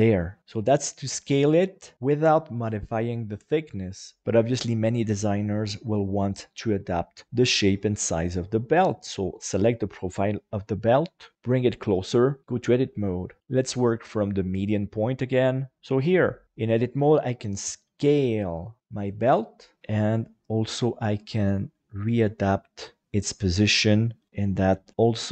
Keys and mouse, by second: 0.4 Tab, 11.3 g, 11.5 click, 12.4 shift+Tab, 12.4 shift+middle click, 13.4 alt+a, 13.5-14.6 drag, 16.4 a, 16.9 s, 19.8 g.